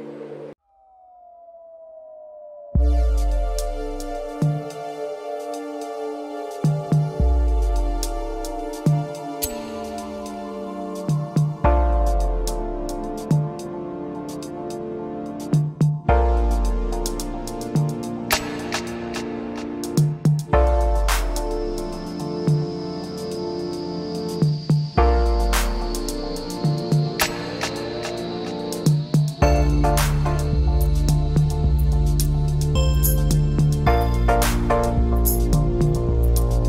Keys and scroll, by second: 24.7 ctrl+Return.